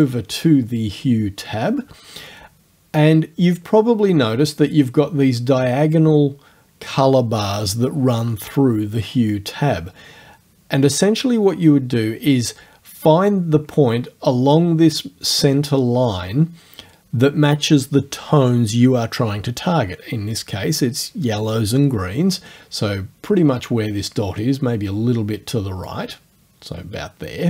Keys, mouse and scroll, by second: 25.9 click.